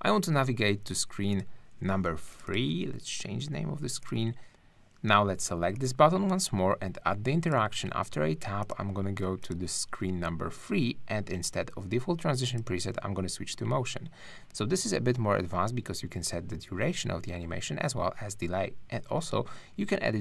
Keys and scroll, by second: 2.7 3.